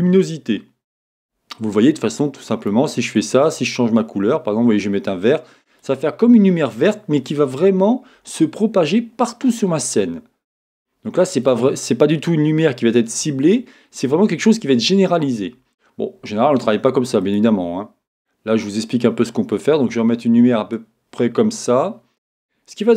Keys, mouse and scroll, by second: 7.6-9.6 scroll down 1, 9.6-10.8 middle drag, 10.8-12.1 scroll up 1, 12.1-12.7 scroll up 1, 18.5 click.